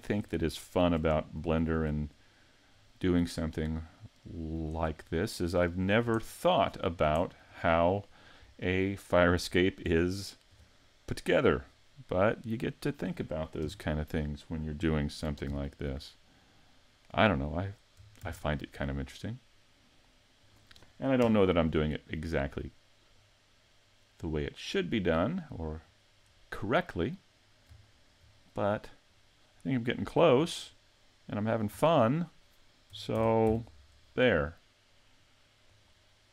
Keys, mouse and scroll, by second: 0.0 click, 0.2-0.6 scroll up 5, 0.6 shift+middle click, 1.1-1.7 scroll up 2, 1.6 shift+middle click, 2.7 click, 5.0-5.8 scroll down 3, 5.8 scroll down 4, 6.2 shift+middle click, 6.8-7.4 scroll down 2, 7.2 shift+middle click, 10.0 shift+middle click, 11.5 middle click, 13.6 KP_3, 15.5 ctrl+KP_3, 18.2 shift+d, 20.5 click, 21.2 KP_Decimal, 23.2 click, 25.9 right click, 27.5-27.9 scroll down 1, 27.9 shift+middle click, 29.1 click, 30.4 scroll down 5, 31.4 right click, 31.8 scroll down 2, 33.2 shift+d, 35.8 click.